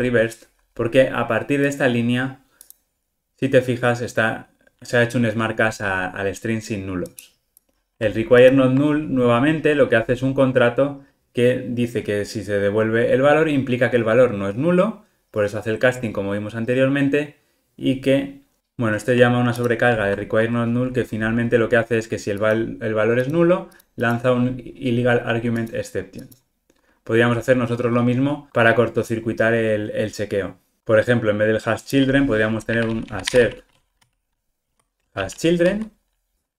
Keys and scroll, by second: 0.0 Return, 8.6 super+b, 19.6 super+b, 28.3 alt+super+[, 34.8 Delete, 35.6 Escape.